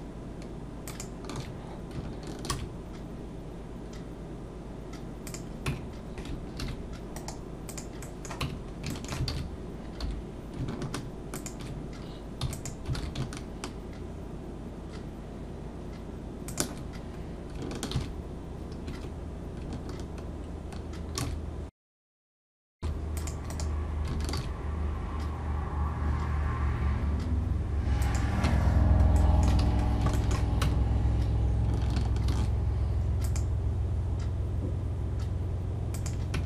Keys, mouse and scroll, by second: 0.9 alt+shift+click, 2.5 ctrl+b, 5.7 Tab, 6.6 ctrl+2, 7.1 right click, 8.0 middle click, 8.4 Tab, 8.6 scroll up 2, 8.9 shift+middle click, 9.3 alt+a, 10.0 3, 11.3 alt+shift+click, 12.4 e, 12.9 alt+s, 17.1-17.5 scroll up 2, 17.9 ctrl+f, 21.2 ctrl+b, 22.8 ctrl+r, 24.3 ctrl+b, 28.4 Tab, 29.1 middle click, 29.6 alt+a, 29.8 scroll down 2, 30.1 shift+middle click, 30.6 Tab, 32.3 ctrl+r, 36.3 Tab.